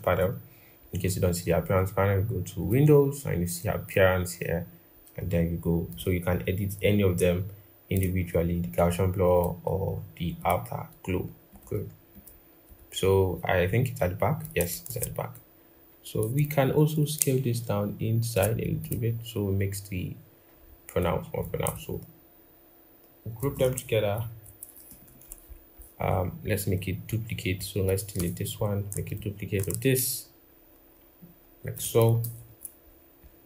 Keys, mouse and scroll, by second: 14.6 ctrl+z, 16.6 shift+click, 23.2 ctrl+g, 24.8 ctrl+-, 25.6-26.5 scroll, 27.9 BackSpace, 29.0 alt+click, 32.0 ctrl+=.